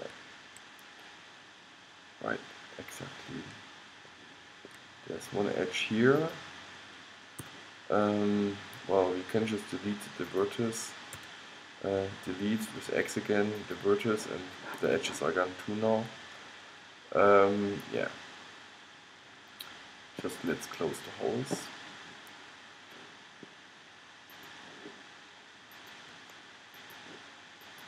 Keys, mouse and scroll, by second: 0.3 middle click, 1.8 middle click, 2.2 middle click, 6.0 middle click, 6.4-8.3 drag, 7.6 g, 8.3 middle click, 10.5-12.4 drag, 11.3 x, 16.0 middle click, 16.7 middle click, 16.9-18.1 middle drag, 18.4 middle click, 18.6-20.4 middle drag, 24.4-27.8 middle drag.